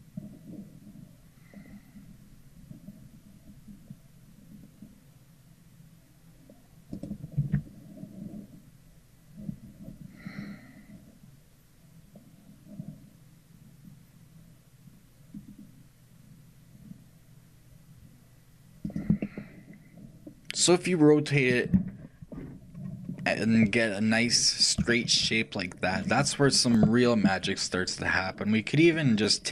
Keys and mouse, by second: 19.3-28.1 middle drag, 29.2-29.5 right drag.